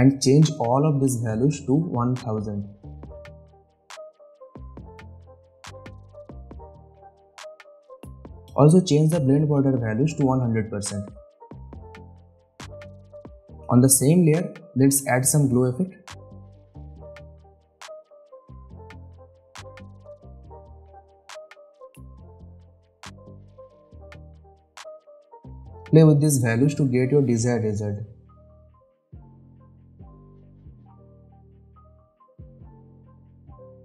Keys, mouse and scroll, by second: 3.2 Return, 4.6 click, 5.2 Return, 5.5 click, 5.9 Return, 6.2 click, 6.7 BackSpace, 6.7 Return, 9.9-11.2 drag, 16.7 click, 17.3-18.6 typing, 20.2 click, 21.7-22.2 scroll down 1, 22.2-22.8 scroll up 1, 22.8-24.6 scroll down 1, 25.2-26.5 scroll up 1, 26.8-29.3 drag.